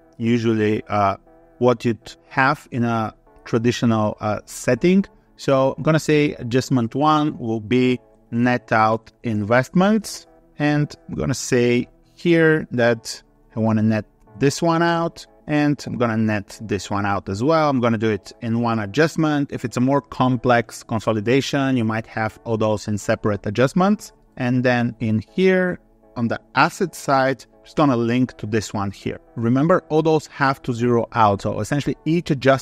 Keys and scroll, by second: 26.5 ctrl+Down.